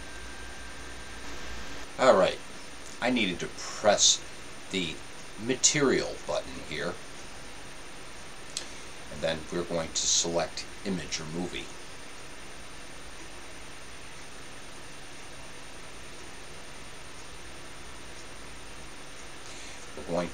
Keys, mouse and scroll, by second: 4.8-11.7 drag.